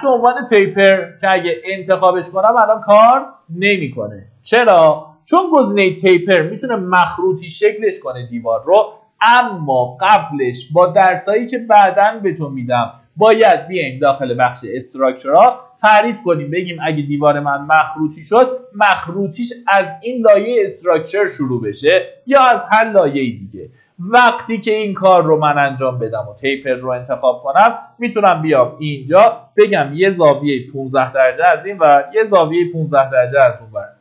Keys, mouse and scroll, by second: 30.2 KP_1, 31.2 KP_5, 31.4 click, 32.2 KP_1.